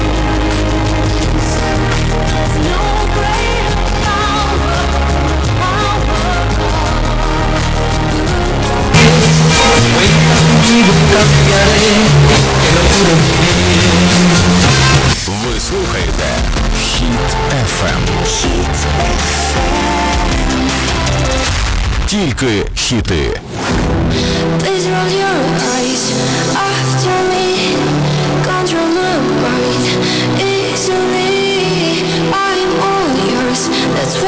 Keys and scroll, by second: 15.5 Page_Down.